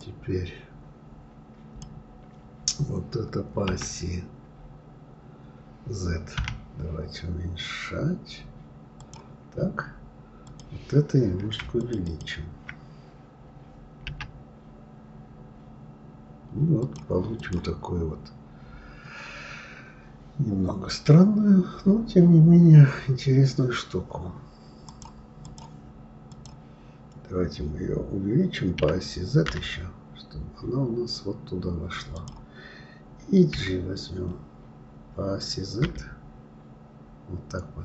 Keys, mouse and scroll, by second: 10.4 click, 11.8 shift+click, 12.0 shift+click, 14.1 s, 17.3 click, 24.8-26.4 drag, 28.8 s.